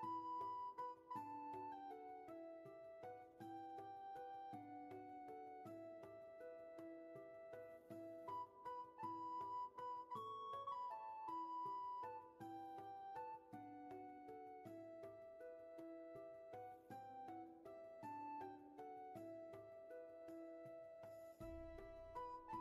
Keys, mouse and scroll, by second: 4.3 ctrl+z, 6.6 ctrl+z.